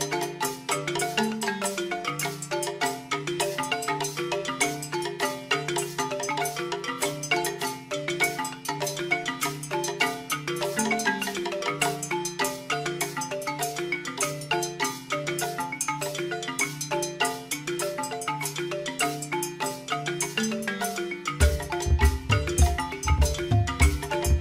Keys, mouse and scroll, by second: 0.9 g, 7.3 click, 8.6 click, 21.7 click, 23.7 shift+click.